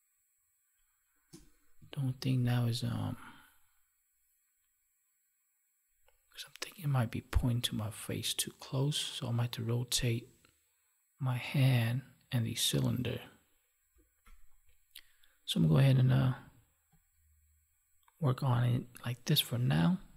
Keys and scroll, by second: 2.0 ctrl+1, 14.3 F9.